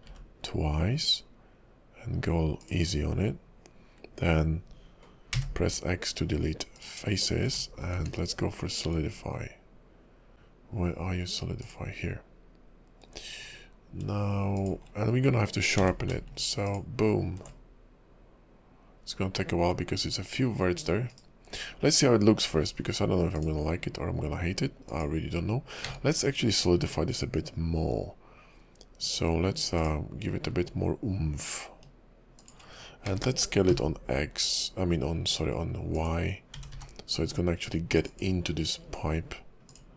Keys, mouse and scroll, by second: 5.3 x, 7.4 Tab, 7.7 scroll down 2, 8.0 q, 15.1 scroll up 3, 15.8 q, 20.7 scroll down 4, 21.2 /, 21.9-22.5 scroll down 5, 22.5-23.4 scroll up 5, 23.4 click, 23.4-24.9 scroll up 3, 24.9 click, 25.7 scroll up 1, 25.8 q, 33.1 s, 36.0 s, 36.5 g, 38.8-39.6 scroll down 8.